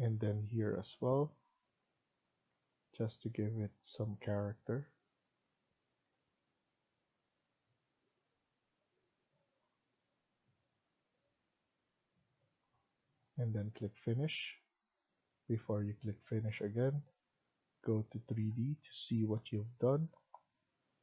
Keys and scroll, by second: 2.4 Escape, 6.0 Escape, 9.5 Escape, 12.6 Escape.